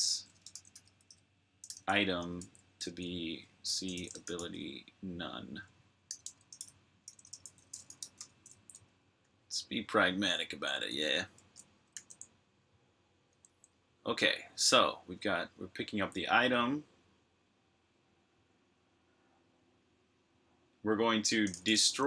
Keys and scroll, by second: 1.0-2.3 typing, 3.3-4.5 typing, 5.7-10.5 typing, 11.8 super+j, 13.1 typing, 21.1-22.0 typing.